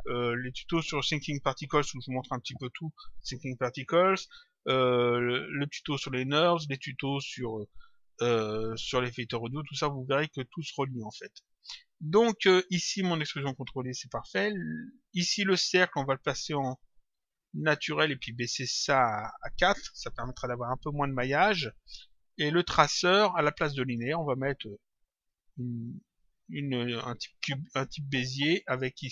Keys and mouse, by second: 10.6 click, 14.4 click, 16.4 click, 19.0 click, 21.0 click, 22.5 click, 23.9 click, 25.7 click, 28.5 click.